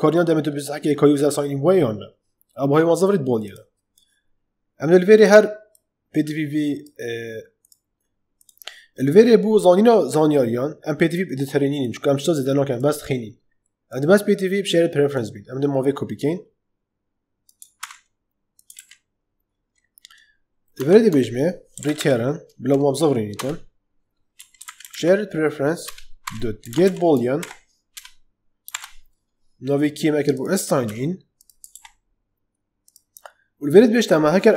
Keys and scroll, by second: 17.7 ctrl+c, 20.7 Tab, 21.4-22.2 typing, 23.3 Return, 24.0-27.3 typing, 25.8 Return, 27.8 Return, 28.6 shift+', 30.8 ctrl+c.